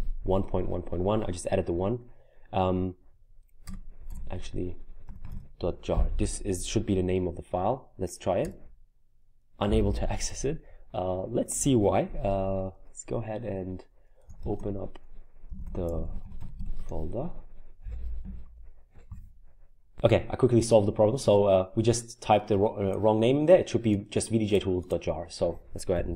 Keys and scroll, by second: 4.1-5.8 typing, 8.4 Return, 14.1-16.9 typing, 18.2 Up, 25.7-26.1 typing.